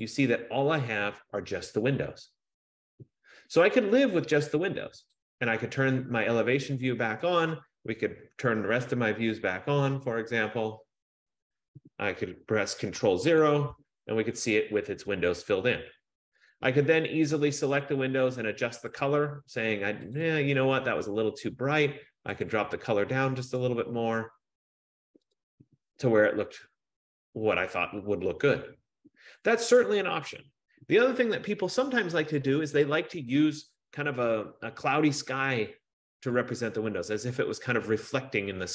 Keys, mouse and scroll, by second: 0.2 click, 5.2 click, 10.3 click, 13.4 ctrl+0, 18.1 click, 20.4 click, 20.6 click, 22.5 click, 23.8 click, 25.5 click, 34.8 F15.